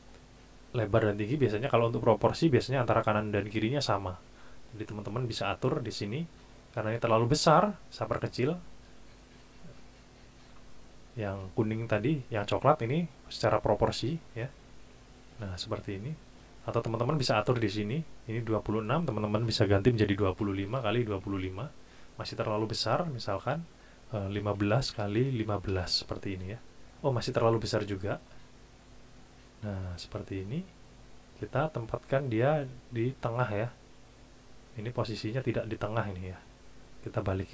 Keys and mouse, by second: 8.8 click, 13.3 click, 14.9 click, 16.1 click, 18.5 click, 20.1 KP_2, 20.4 KP_5, 20.6 KP_Enter, 21.0 KP_2, 21.2 KP_5, 21.4 KP_Enter, 23.3 click, 24.4 KP_1, 24.7 KP_5, 24.9 KP_Enter, 25.2 KP_1, 25.4 KP_5, 25.7 KP_Enter, 28.6 click, 30.7 click, 33.6 click, 34.5 click, 35.2 click.